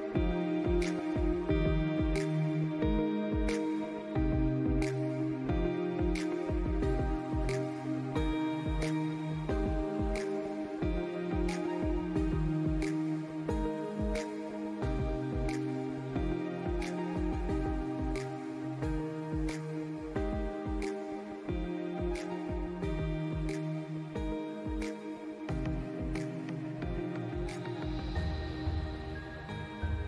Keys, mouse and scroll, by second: 1.4 scroll up 1, 2.6-7.5 drag, 10.7 alt+scroll up 1, 11.5 alt+scroll down 1, 12.3 alt+scroll up 1, 12.6 click, 13.0 alt+scroll up 1, 13.8 click, 14.3-14.9 alt+scroll down 1, 15.3 alt+scroll up 1, 16.0-20.7 drag, 20.7 scroll up 1, 21.4-22.9 drag, 22.9 scroll up 1, 23.6-26.9 drag, 26.9 space, 27.0 click, 28.1-30.0 drag.